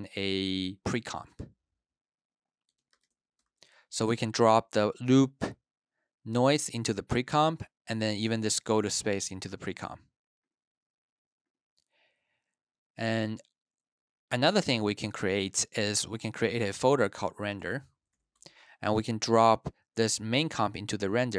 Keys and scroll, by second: 0.8-3.4 typing, 17.1-18.5 typing, 19.6 typing.